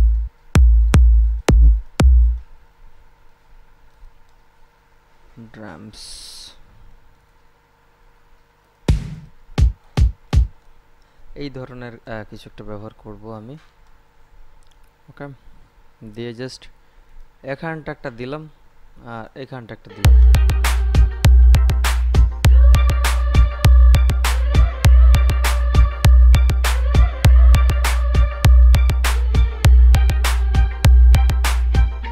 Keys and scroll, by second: 20.1 space.